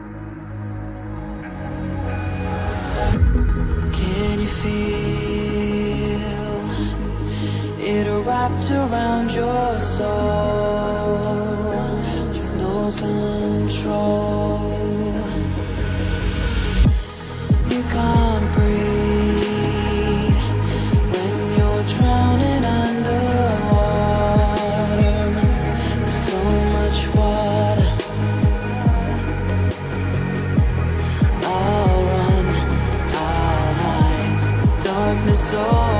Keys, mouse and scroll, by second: 0.5 right click, 1.4 click, 2.9 scroll down 1, 4.2 click, 4.5 double click, 5.4 scroll up 1, 6.3 click, 7.4 click, 8.5 right click, 9.4 click, 14.6 scroll down 1, 17.0 scroll up 1, 17.7 click, 18.0 double click, 19.3 click, 21.4 ctrl+c, 21.6 ctrl+v, 22.6 click, 26.3 double click, 28.4 click, 29.9 right click, 30.9 click, 34.1 scroll down 1.